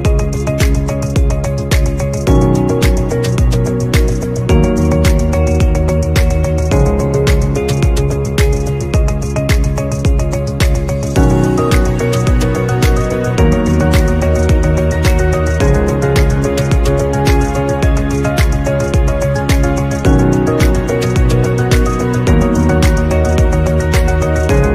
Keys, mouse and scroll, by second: 0.1 shift+click, 1.6 shift+click, 5.5 shift+click, 17.3 shift+click, 18.5 shift+click, 20.2 right click, 24.1 right click.